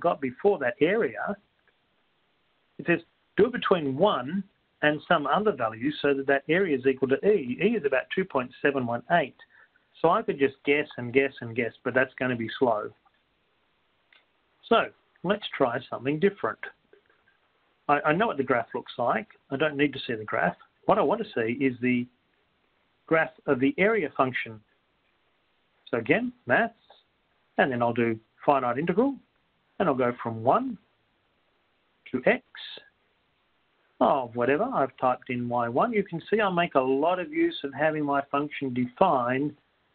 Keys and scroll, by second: 14.5-16.1 typing, 18.0 Left, 21.0 Up, 21.0 Return, 23.6 Down, 23.6 Right, 28.8 9, 30.6 1, 31.6 Up, 34.3 Right, 35.5 x, 38.1 1.